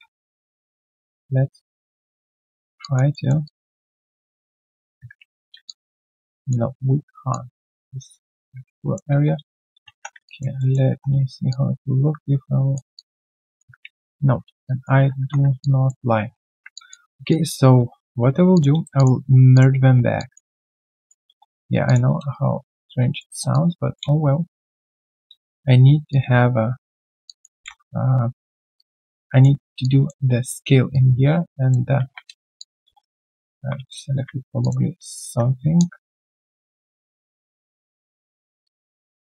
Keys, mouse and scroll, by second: 0.0-0.4 typing, 2.8 alt+click, 3.1 alt+middle click, 3.4 alt+click, 5.2 ctrl+z, 5.6 alt+click, 6.7 alt+click, 7.5 alt+middle click, 7.8 alt+click, 9.9 3, 10.2 alt+click, 10.5 alt+middle click, 10.8 w, 11.4 shift+click, 12.9 alt+click, 13.8 ctrl+z, 14.6 alt+click, 15.6 alt+click, 16.7 alt+click, 17.0 alt+right click, 17.3 alt+click, 17.7 right click, 17.7 q, 18.9 shift+click, 20.1 alt+click, 21.8 shift+click, 22.3 shift+right click, 22.3 click, 23.5 alt+click, 23.5 shift+right click, 24.0 alt+q, 24.0 click, 24.2 right click, 25.4 Tab, 27.2 alt+click, 27.5 alt+w, 27.5 click, 27.6 r, 28.7 alt+click, 29.7 alt+click, 29.8 alt+click, 32.5 alt+click, 33.0 right click, 33.5 ctrl+z, 33.7 ctrl+z, 35.5-36.2 scroll down 2, 37.2 alt+right click, 37.4 alt+click, 37.7 alt+right click, 38.4 alt+right click.